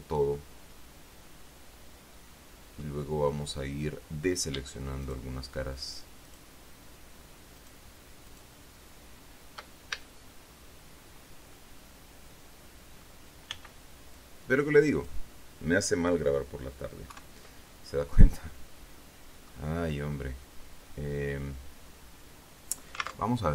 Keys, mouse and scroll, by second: 0.0-3.3 middle drag, 3.6 scroll up 2, 5.4 shift+right click, 6.6 shift+right click, 7.9 shift+right click, 8.6 shift+right click, 10.3 shift+a, 11.9-13.6 drag, 13.9 b, 14.5-15.6 drag, 17.4 KP_3, 18.1-20.0 drag, 20.1 scroll up 2.